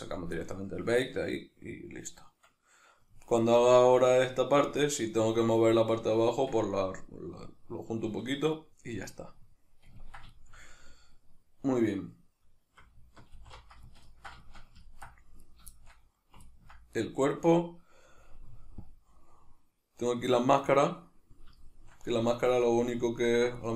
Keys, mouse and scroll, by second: 13.4 alt+h, 15.4 right click, 15.8-17.0 shift+middle drag, 17.0-18.8 right drag, 18.8-21.7 drag, 21.7-23.5 shift+middle drag, 23.5 right click.